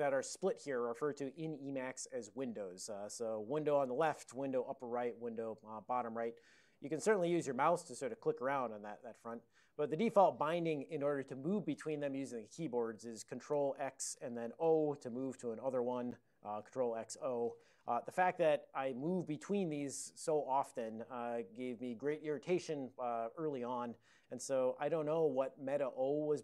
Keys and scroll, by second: 13.8 ctrl+x, 14.7 o, 15.8 ctrl+x, 16.4 o, 17.4 ctrl+x, 17.7 o.